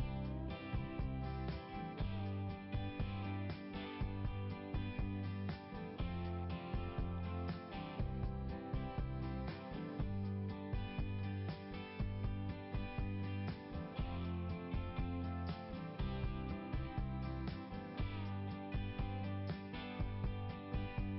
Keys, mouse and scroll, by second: 8.4 click, 11.4 right click, 14.8 click, 19.1 click, 20.5 click.